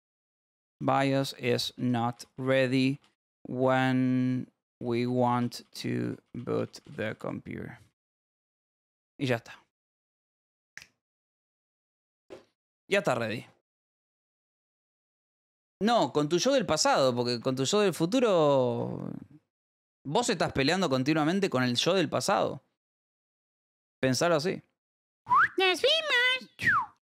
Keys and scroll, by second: 0.0-8.6 typing, 9.3 ctrl+s, 24.2 j.